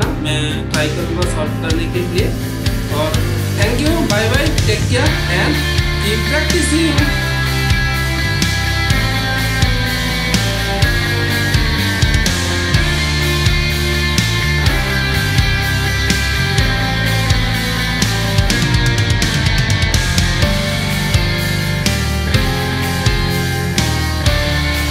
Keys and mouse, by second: 5.2-24.9 middle drag.